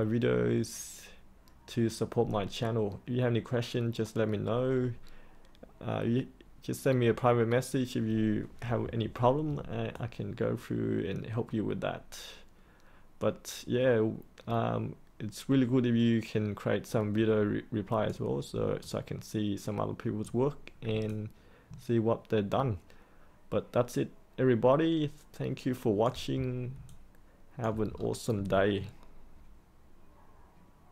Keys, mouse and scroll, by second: 9.9-18.1 alt+drag, 18.7-20.2 alt+drag, 21.0-26.0 alt+drag, 26.4-26.7 scroll up 1, 26.9 alt+click, 27.9-30.9 scroll down 1.